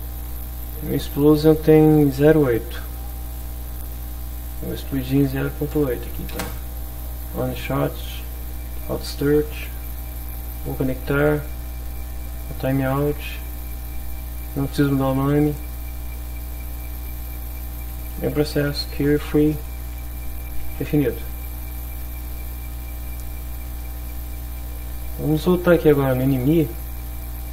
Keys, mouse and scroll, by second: 3.3 click, 4.5 click, 5.5 0, 5.7 ., 6.1 8, 6.3 Return, 7.5 click, 7.9 click, 9.6 click, 10.7 click, 12.2 click, 13.3 click, 15.3 click, 17.2 click, 18.5 q, 18.6 u, 18.7 e, 19.5 Return, 20.7 ctrl+s, 21.9 click, 22.7 click, 26.6 click.